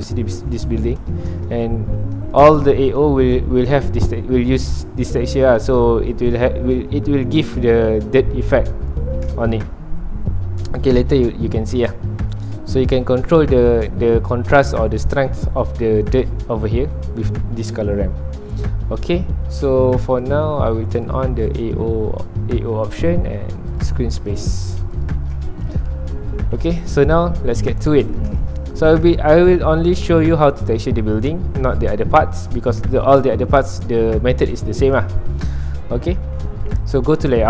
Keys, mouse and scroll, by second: 0.7-1.4 scroll up 3, 1.0 shift+middle click, 1.4 alt+a, 1.6 scroll down 2, 1.7 middle click, 2.6-3.7 scroll up 2, 3.7-4.0 scroll up 1, 13.9-21.0 drag, 23.7 click, 24.9 click, 26.0 scroll down 1, 26.1 middle click, 26.6 ctrl+s, 26.8-28.0 middle drag, 28.0 ctrl+s, 28.3-29.4 shift+middle drag, 29.4 scroll up 1, 29.5-29.9 scroll down 1, 29.9-35.1 middle drag, 35.1 click, 36.9 click.